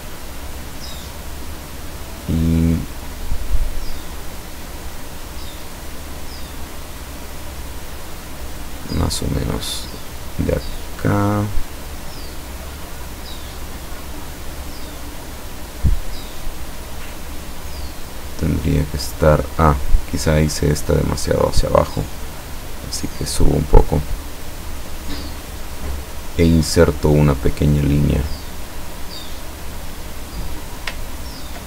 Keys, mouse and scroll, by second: 20.7 click, 22.2-23.5 drag, 25.8 click, 31.1 ctrl+scroll up 2.